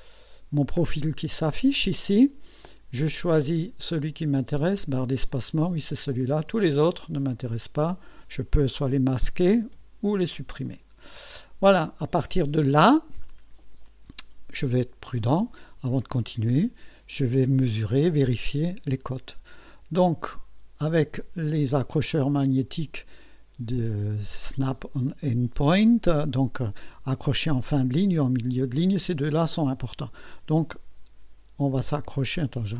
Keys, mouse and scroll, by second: 0.5 scroll down 1, 3.2 click, 4.0 space, 5.8 click, 7.3 shift+click, 9.7 Delete, 10.7 click, 11.8 scroll up 1, 12.5 scroll down 1, 18.2 click, 20.3-20.7 scroll up 2, 21.8 right click, 32.0-32.4 scroll up 1.